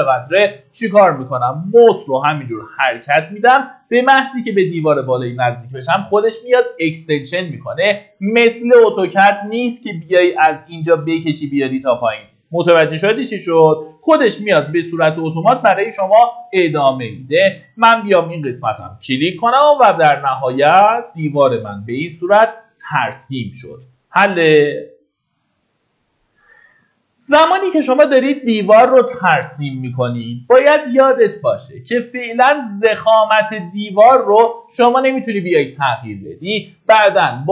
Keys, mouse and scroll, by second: 22.3-22.9 scroll down 1, 22.9 middle click, 23.6-24.5 scroll up 1, 31.5 click, 32.3-33.7 scroll up 1.